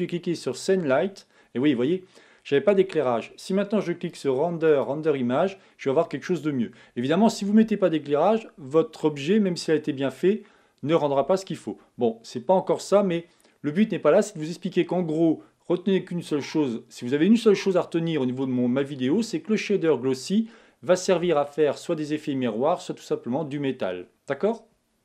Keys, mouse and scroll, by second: 1.1-4.8 drag.